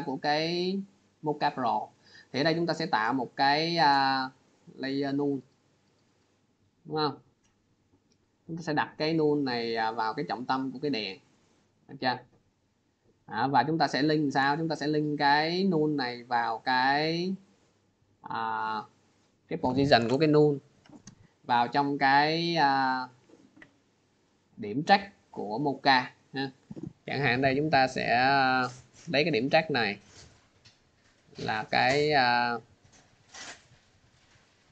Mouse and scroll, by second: 1.4 click, 2.6 click, 3.5 click, 4.3 click, 5.3 click, 7.0 click, 10.6 click, 17.4 click, 19.6 click, 21.1 click, 22.0 click, 23.3 click, 25.2 click, 27.9 click, 29.7 click, 32.3 click, 34.3 click.